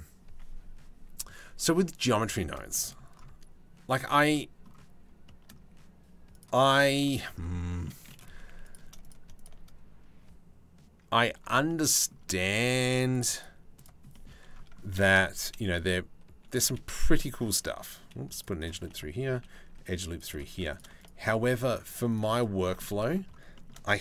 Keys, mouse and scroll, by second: 2.1 shift+middle click, 3.9-6.0 middle drag, 6.0 click, 6.3 Tab, 6.8 shift+middle click, 8.0 3, 8.6 shift+click, 13.7 shift+middle click, 14.5-16.4 shift+middle drag, 16.6 ctrl+r, 19.0 ctrl+r, 20.1 3, 22.3 middle click, 22.6 middle click, 23.1 shift+middle click.